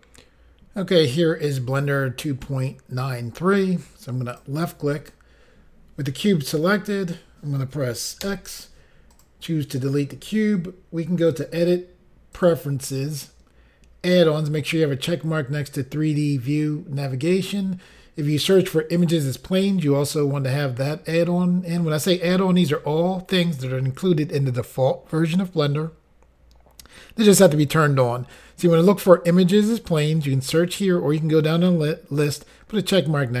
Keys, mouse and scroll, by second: 4.3 click, 9.1 click, 11.3 click, 12.3 click.